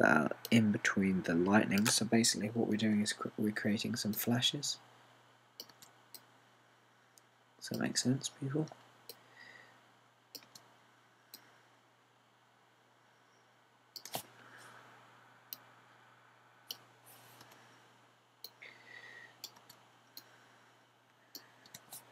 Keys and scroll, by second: 3.9 BackSpace, 6.7 BackSpace, 8.9 BackSpace, 11.4 BackSpace, 18.5 BackSpace, 20.6 BackSpace.